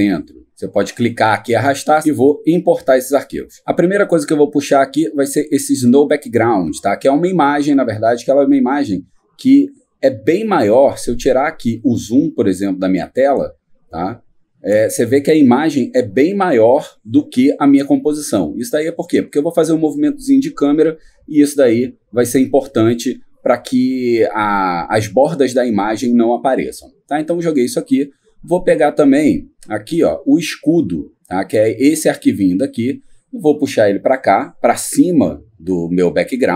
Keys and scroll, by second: 12.3 ctrl++.